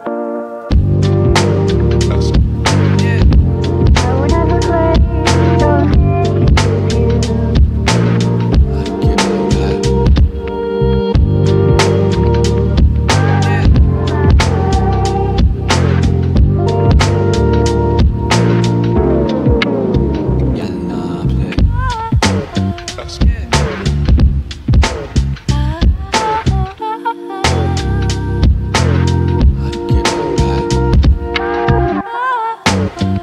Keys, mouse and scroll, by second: 6.7 right click, 10.5 typing, 11.9 click, 12.3 right click, 15.2 scroll up 1, 15.6 right click, 18.5 click, 19.1 scroll down 1, 22.2 click, 25.2 shift+click, 25.5 shift+right click, 26.2 click, 32.4-33.2 scroll up 1.